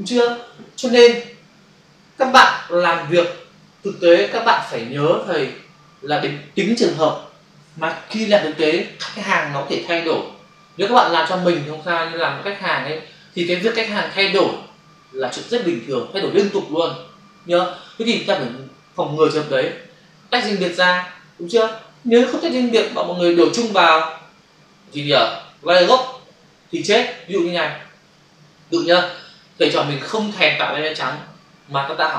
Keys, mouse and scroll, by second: 2.2 ctrl+alt+z, 5.0 ctrl+s, 29.0 click.